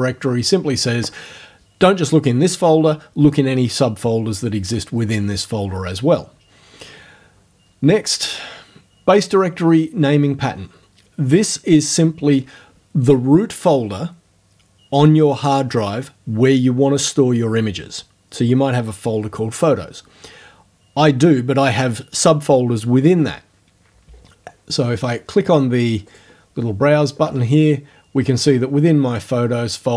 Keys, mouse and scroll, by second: 26.1 click, 28.4 click.